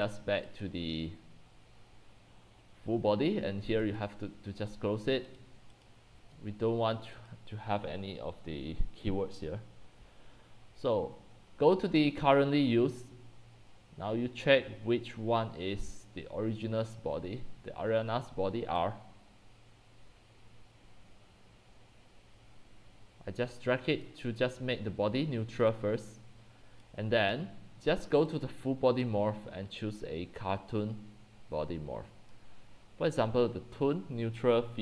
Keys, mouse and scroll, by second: 0.4-3.4 drag, 3.9 click, 5.8 click, 7.4-11.7 drag, 16.7-17.6 drag, 18.7-24.0 drag, 24.1-30.0 drag, 30.1 click, 30.8-34.8 drag.